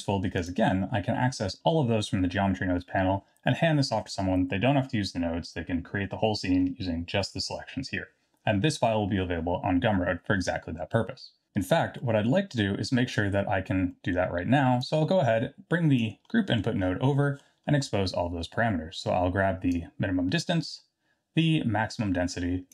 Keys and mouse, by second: 0.4 click, 12.1 middle click, 12.7 middle click, 14.0 middle click, 14.8-15.9 drag, 16.3 middle click, 17.1 middle drag, 19.7-20.4 drag, 21.9-22.7 drag.